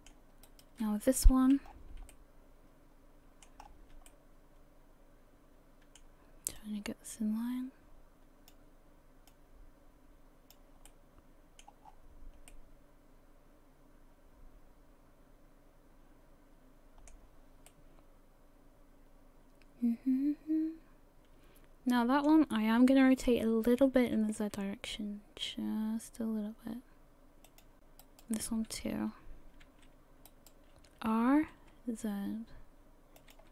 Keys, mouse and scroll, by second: 0.5 right click, 1.2 l, 1.7-2.1 scroll down 5, 2.1 middle click, 3.6 scroll up 4, 4.1 shift+middle click, 6.6 click, 9.3 click, 10.9 middle click, 11.9-12.4 scroll down 5, 12.5 middle click, 17.7 middle click, 23.9 r, 28.0 right click, 28.9 l, 29.6 z, 31.1 r.